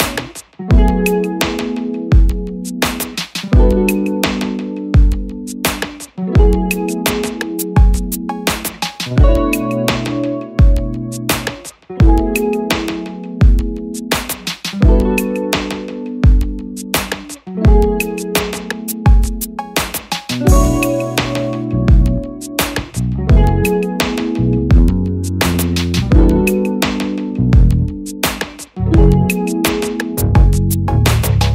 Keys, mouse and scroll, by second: 8.3 double click.